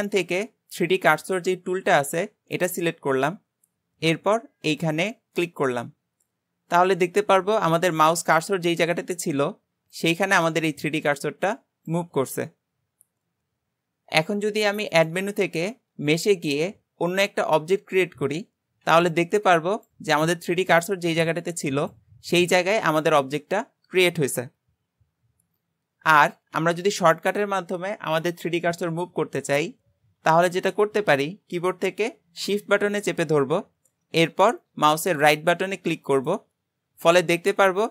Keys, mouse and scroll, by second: 2.5-5.6 drag, 14.9-18.0 drag, 36.1 shift+right click.